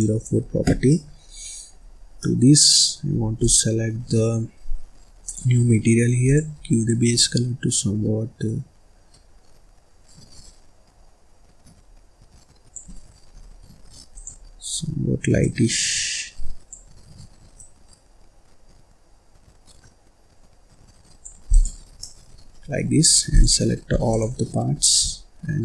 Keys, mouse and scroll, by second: 0.8-1.8 middle drag, 1.8-2.1 scroll up 4, 2.1 middle click, 3.1 scroll up 1, 3.3 click, 5.1-6.2 drag, 14.0 click, 21.4 click, 21.9-23.0 middle drag, 23.0-23.3 scroll up 1, 23.3 click, 24.0 shift+click, 24.7 shift+click.